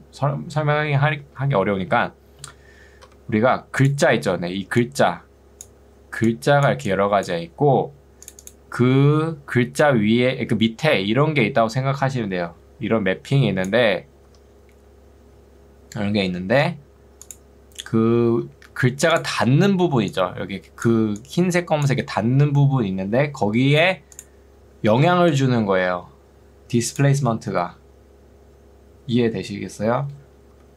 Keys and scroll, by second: 1.2 ctrl+2, 3.2 Escape, 4.2 ctrl+2, 7.8 Escape, 9.2 ctrl+2, 14.4 Escape, 19.4 ctrl+2, 23.6 Escape, 25.0 ctrl+2, 30.6 Escape.